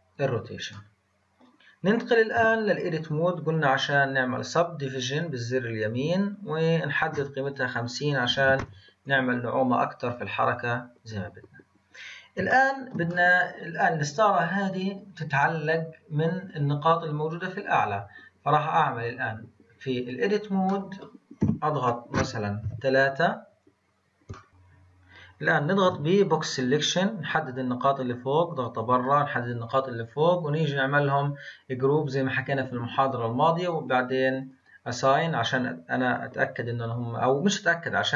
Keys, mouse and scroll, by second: 2.6 Tab, 3.8-6.8 right drag, 6.8-11.4 drag, 11.7-12.8 scroll up 1, 12.8-16.4 shift+middle drag, 17.6-20.7 drag, 21.0 middle click, 21.7 KP_1, 22.9 KP_3, 23.6-24.1 scroll up 3, 24.5 a, 25.8 b, 27.4 click, 31.0-37.6 drag.